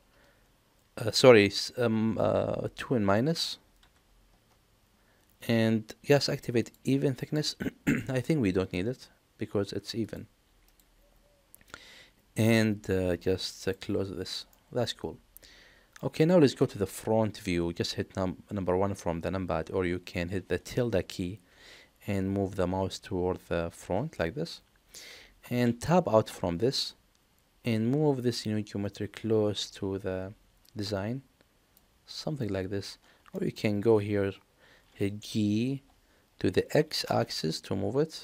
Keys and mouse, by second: 6.6 click, 7.2 click, 8.4 middle click, 10.0 click, 10.6 click, 13.6 click, 14.5-15.9 middle drag, 16.5 KP_1, 26.2 Tab, 28.3-31.7 drag, 33.3 shift+middle drag, 35.6 g.